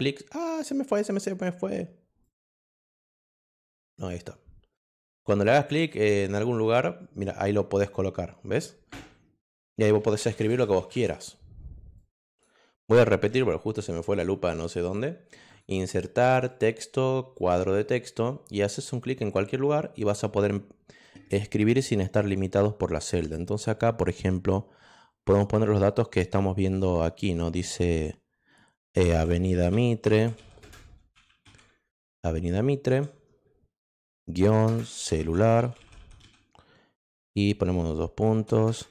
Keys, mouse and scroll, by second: 2.2 click, 5.3 click, 5.7 click, 7.8 click, 9.7-11.4 typing, 11.9 click, 15.4 click, 16.4 click, 17.3 click, 19.2 click, 28.8-32.8 typing, 34.4-36.7 typing.